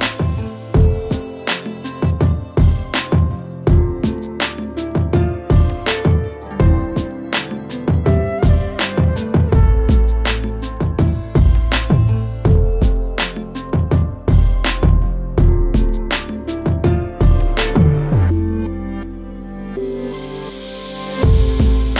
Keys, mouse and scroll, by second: 0.6 click, 1.8 ctrl+k, 2.2 click, 2.7-3.0 scroll, 3.6 middle click, 4.0 middle click, 5.6 middle click, 6.4 middle click, 6.5 middle click, 6.6 middle click, 6.6 scroll, 6.8 middle click, 6.9 middle click, 7.2-8.5 scroll, 7.8 z, 9.1-12.0 scroll, 9.7 z, 13.2 click, 14.1 click, 14.9-16.0 typing, 17.1 click, 19.4-20.2 typing, 20.3 click, 21.2 middle click, 21.2 middle click.